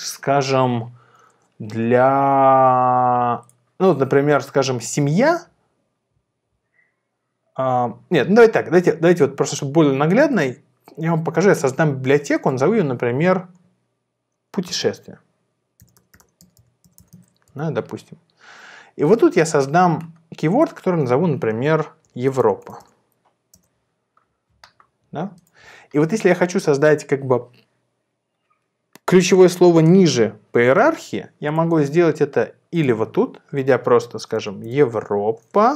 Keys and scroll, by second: 14.4-17.5 typing, 21.8-23.2 typing, 23.7 Return, 34.2-35.0 typing.